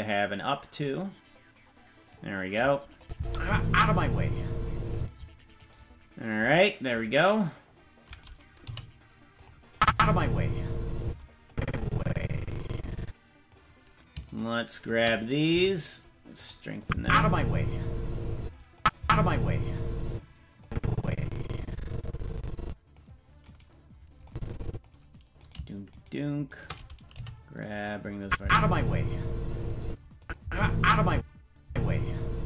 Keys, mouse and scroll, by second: 0.7-2.1 drag, 3.0 click, 3.1 space, 4.9 space, 5.6 right click, 8.1 right click, 8.6 g, 9.7 click, 9.8 space, 11.0 space, 11.4-13.5 drag, 14.3-15.5 shift+right drag, 15.5 g, 16.8 click, 16.9 space, 18.4 space, 18.7 click, 18.9 space, 20.0 space, 20.6-23.0 drag, 23.4 right click, 24.2 click, 25.9-27.1 shift+right drag, 27.1 g, 28.2 click, 28.4 space, 29.8 space, 30.2 click, 30.4 space, 31.1 space, 31.6 space.